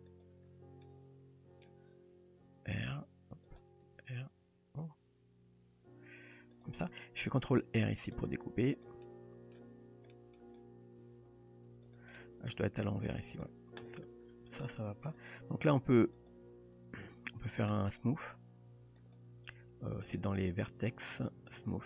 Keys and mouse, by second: 0.8 middle click, 2.5 r, 3.9 r, 7.6 ctrl+r, 9.1 middle click, 10.1 shift+middle drag, 11.0 g, 12.2-12.5 middle drag, 13.4 drag, 15.1 click, 16.1 click, 19.1-21.8 drag.